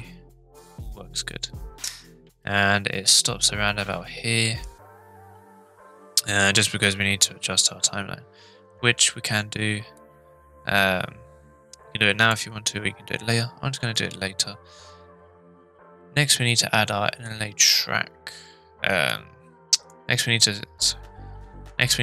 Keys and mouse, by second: 2.2 space, 10.0-12.3 drag, 13.9 click, 19.1-19.9 drag.